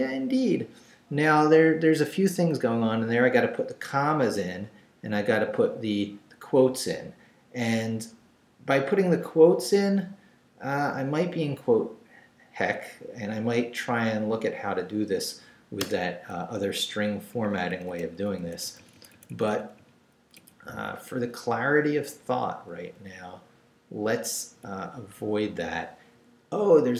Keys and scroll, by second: 15.8 Return, 16.8 Left, 17.3 Up, 18.4 Right.